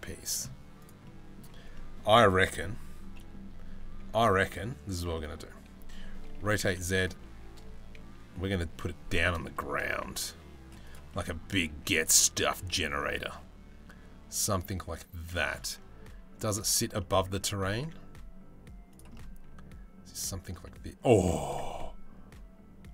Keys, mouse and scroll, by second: 0.7 middle click, 0.7 s, 1.4 middle click, 2.7 middle click, 3.4 g, 4.8 middle click, 6.0 r, 8.8 middle drag, 10.0 s, 10.8 middle click, 11.3 g, 16.6 middle click, 17.3 g, 21.1-22.9 middle drag.